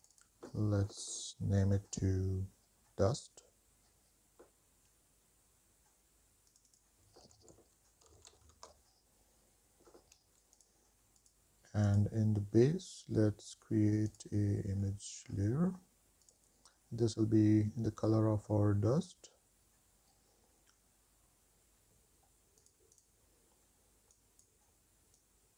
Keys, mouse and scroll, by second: 5.0 shift+click, 6.3 click, 11.4 click, 12.1 click, 14.3 click, 15.0-19.5 scroll down 5, 21.8-25.5 drag.